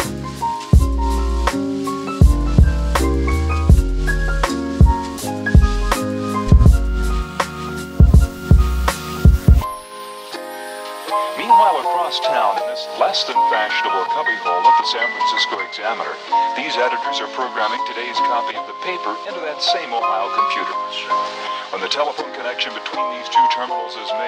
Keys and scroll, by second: 19.2 space.